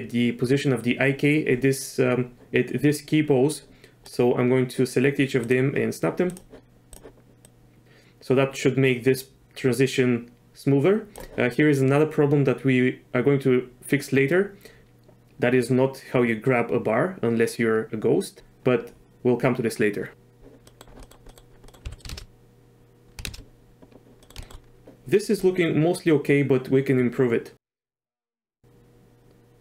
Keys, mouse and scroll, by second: 4.0 click, 7.4-11.2 drag, 14.8-18.4 drag, 20.7 middle drag, 21.0 middle click, 21.3 click, 21.7 click, 21.8 z, 22.1 shift+space, 23.2 shift+space, 24.2 click, 24.4 shift+click, 25.4-29.6 drag.